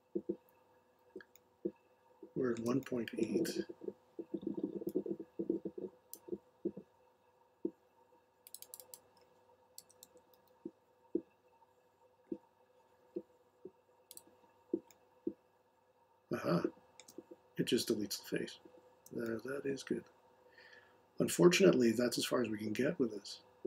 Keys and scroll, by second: 9.5-10.8 typing.